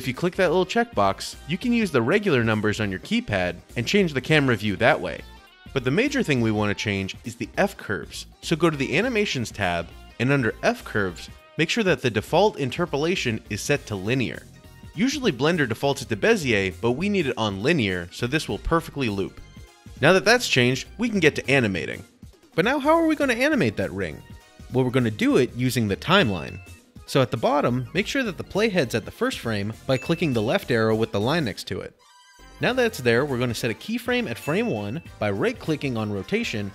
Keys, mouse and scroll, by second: 22.3 click, 24.1-27.1 drag, 29.2 click, 29.6 click, 30.6 click, 32.0 click, 34.9 click.